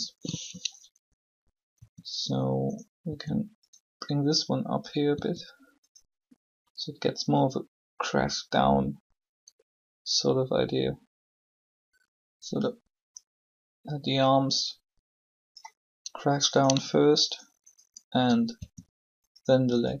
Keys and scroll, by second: 1.7 r, 6.3 r, 18.5 shift+r.